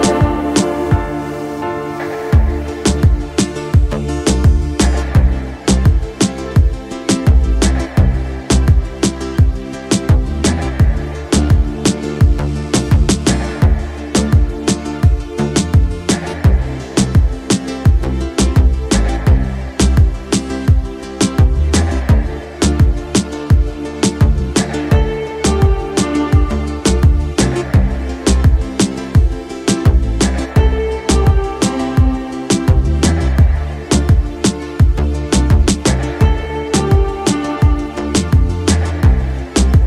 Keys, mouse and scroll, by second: 0.5 shift+middle click, 1.4 shift+middle click, 2.0 shift+middle click, 2.7 middle click, 3.5 shift+middle click, 5.0-7.3 middle drag, 7.5 shift+middle click, 8.2 shift+middle click, 8.8 shift+middle click, 9.4 click, 10.0-14.2 middle drag, 15.8 KP_5, 16.8 KP_Decimal, 17.8-19.7 middle drag, 20.1-21.2 ctrl+middle drag, 21.4-22.7 middle drag, 23.0 shift+middle click, 26.6-29.7 middle drag, 31.6-32.9 middle drag, 33.4-35.2 middle drag, 37.6-39.8 drag.